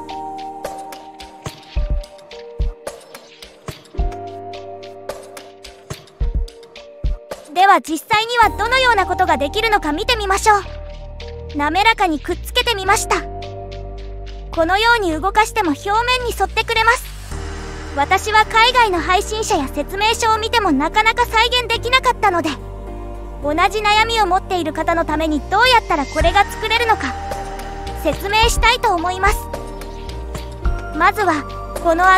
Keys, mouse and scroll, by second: 0.7 click, 1.2 click, 3.0 g, 7.9 click, 9.7 click, 10.8 click, 13.8-16.3 drag, 28.0 click, 28.4 click, 29.1 scroll down 1, 30.4 shift+middle click, 31.3 shift+middle click.